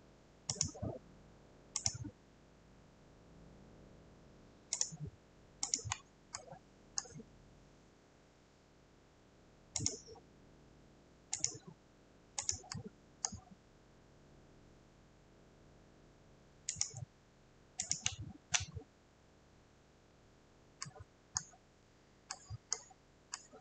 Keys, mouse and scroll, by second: 0.6 click, 1.9 click, 2.9 scroll, 4.9 click, 5.8 click, 6.0 scroll, 7.1 scroll, 9.9 click, 11.5 click, 12.5 click, 13.3 scroll, 16.9 click, 17.9 click, 19.1 scroll, 21.4 scroll, 22.8 scroll.